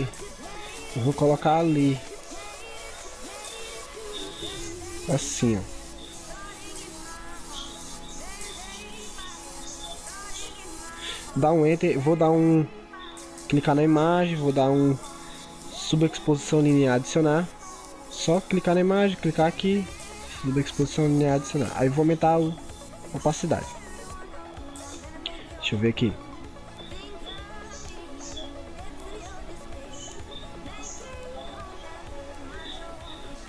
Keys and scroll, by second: 1.5 ctrl+t.